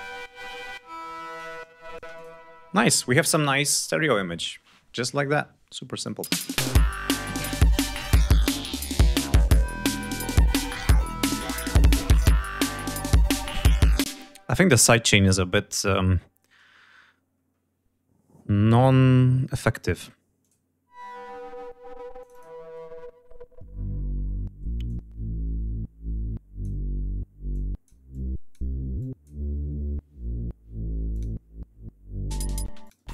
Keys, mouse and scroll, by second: 1.2 click, 2.0 space, 2.0 click, 5.9 click, 6.1 space, 11.2 click, 11.9 click, 13.5-13.8 scroll down 2, 14.0 space, 14.5-15.1 scroll up 1, 15.9-16.9 scroll up 2, 17.3 scroll up 1, 18.2-18.6 scroll up 2, 19.5 click, 19.8 space, 20.3 click, 22.1 click, 24.8-26.7 drag, 27.4 click, 28.0 click, 28.9 click, 31.0 click.